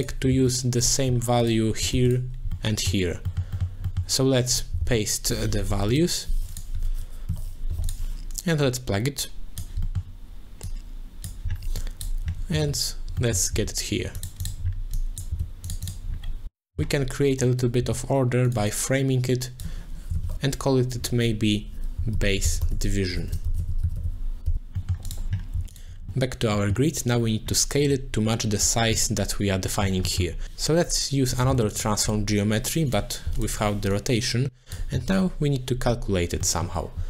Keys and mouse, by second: 0.3 shift+d, 0.8 click, 1.5 click, 2.6 middle click, 3.3 middle click, 3.8 middle click, 4.5-5.9 drag, 5.7 BackSpace, 6.5-7.9 drag, 8.6 click, 8.8 click, 9.8 middle click, 10.6 click, 11.8 click, 12.6 middle click, 13.3 middle click, 13.5 g, 14.4 click, 14.9 click, 15.3 g, 15.8 click, 17.4 click, 17.8 g, 18.7 click, 20.3 ctrl+j, 21.0 F2, 25.0 middle click, 25.0 click, 25.7 alt+shift+click, 26.5 middle click, 30.2 middle click, 31.3 click, 31.5 shift+d, 31.8 click, 32.9 click, 34.1 click, 36.5 middle click.